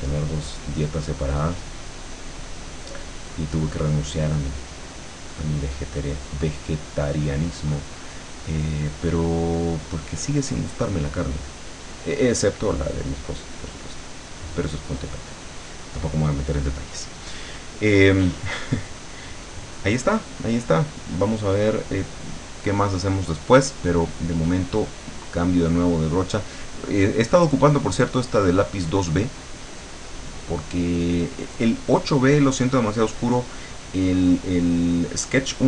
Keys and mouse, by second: 5.2-8.1 drag, 9.4-15.2 drag, 25.2 click.